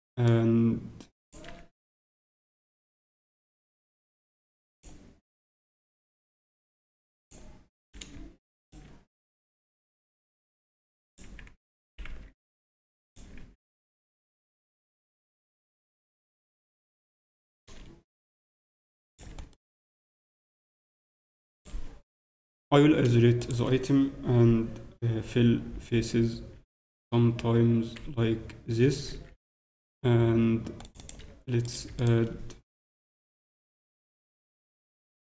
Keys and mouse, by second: 0.2-2.0 drag, 1.8 a, 2.0 a, 2.4 s, 6.0-7.9 drag, 7.8-10.4 right drag, 9.8 e, 11.2 z, 11.9 s, 13.4 z, 13.9 middle click, 15.6 z, 16.5 Tab, 17.2 Tab, 17.4 a, 18.3 a, 18.3-20.3 drag, 19.3 z, 19.5 right click, 21.5 click, 21.5 right click, 22.2 KP_Divide, 22.2 right click, 23.4-25.1 right drag, 25.6 f, 26.3 f, 27.0 f, 31.6-33.9 ctrl+right drag, 32.8 f, 33.9 f, 34.1 z, 34.7 Tab, 34.7 z.